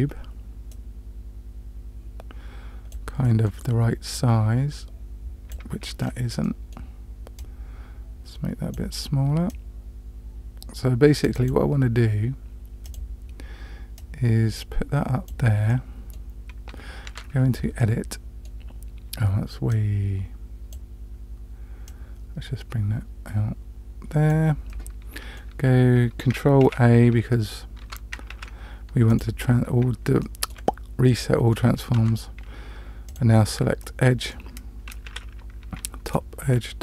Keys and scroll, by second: 17.1 Tab, 26.6 ctrl+a, 27.8 Tab, 28.3 ctrl+a, 32.0 Tab, 35.1 2.